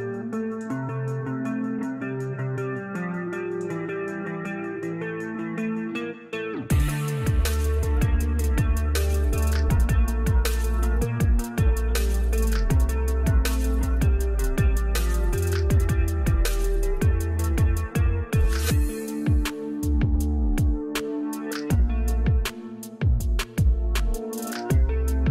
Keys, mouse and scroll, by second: 3.8 ctrl+z, 4.3 click, 5.0 alt+scroll up 1, 5.4 scroll down 1, 5.9 alt+scroll down 1, 6.7 click, 8.9 ctrl+j, 10.3 right click, 12.2 click, 16.9 click, 19.7 click.